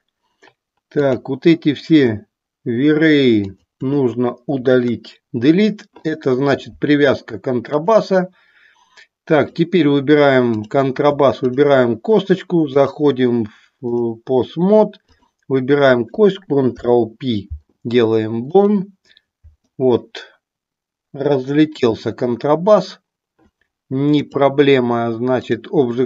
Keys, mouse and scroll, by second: 1.0 click, 3.5 click, 4.7 Delete, 7.7 click, 10.6 click, 12.7-14.1 drag, 15.1 click, 24.1-25.6 drag.